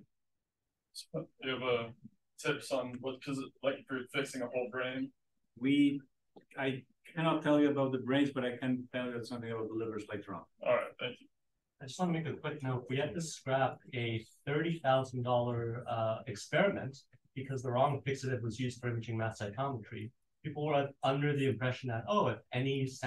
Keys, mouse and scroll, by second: 21.4-21.9 drag.